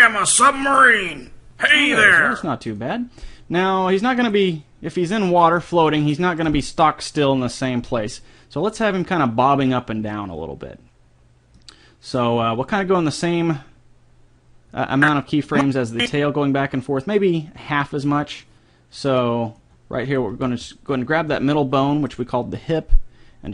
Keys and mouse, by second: 2.3-3.4 drag, 4.2 click, 4.2 right click, 5.2 click, 5.2 right click, 11.6 middle click, 15.0-17.8 drag, 18.1-19.9 drag, 20.0 middle click, 20.3 g.